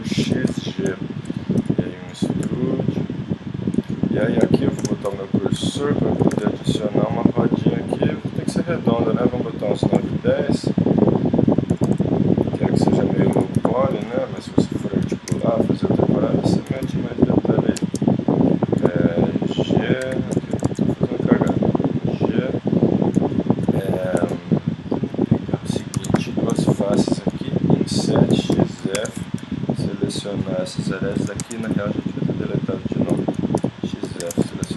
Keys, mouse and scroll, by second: 0.2 x, 1.6 e, 2.4 s, 4.8 shift+s, 5.6 z, 6.3 shift+a, 8.2 click, 10.0 s, 11.7 s, 13.3 r, 15.1 g, 16.7 g, 18.8 g, 20.0 KP_1, 20.7 z, 21.5 g, 24.9 middle click, 25.9 ctrl+Tab, 27.3 i, 28.3 x, 28.9 ctrl+Tab, 29.7-30.8 drag, 30.9 click, 31.4 ctrl+Tab, 33.1 x, 33.6 ctrl+Tab, 34.2 ctrl+Tab.